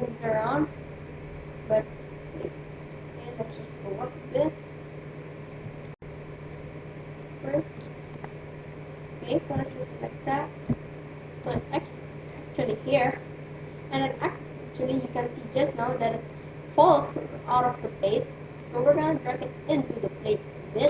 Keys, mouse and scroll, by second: 2.4-4.2 drag, 3.8-6.8 middle drag, 5.7 KP_1, 7.2-8.7 middle drag, 8.7 click, 8.9 right click, 9.6 KP_1, 10.7-12.7 middle drag, 18.9-20.4 drag.